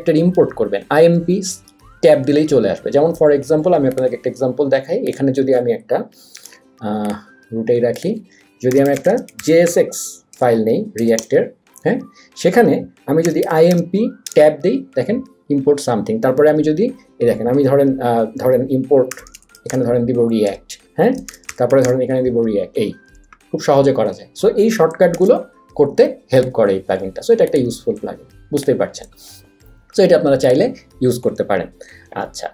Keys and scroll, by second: 6.3 Escape, 8.5-11.0 typing, 11.2 Return, 13.0-14.2 typing, 14.3 Tab, 18.8-22.3 typing, 20.5 Tab.